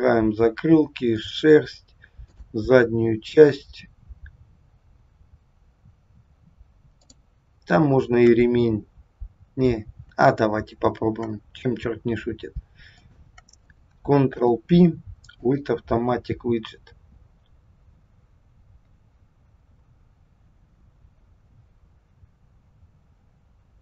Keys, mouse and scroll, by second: 1.1 shift+click, 2.3 shift+click, 6.9 shift+click, 12.9 shift+click, 14.3 ctrl+p.